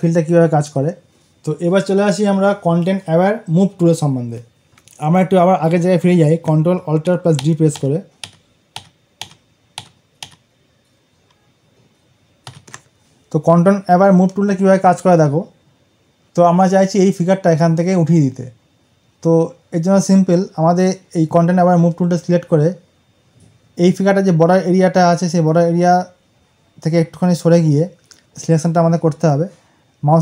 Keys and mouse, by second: 6.3 ctrl+d, 7.3 ctrl+alt+z, 12.4 ctrl+alt+z, 28.2-30.2 drag.